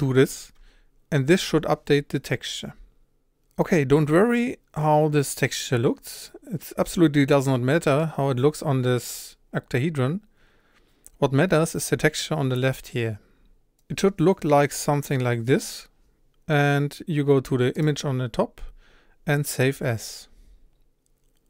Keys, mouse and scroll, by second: 3.6-6.9 middle drag, 12.9-21.4 drag.